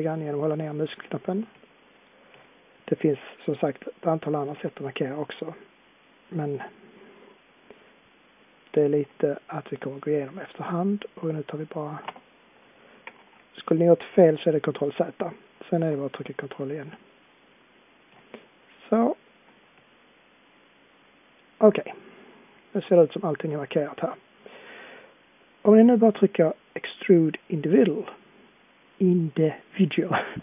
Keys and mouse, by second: 1.9-6.1 middle drag, 13.0 ctrl+z, 26.6-27.9 middle drag.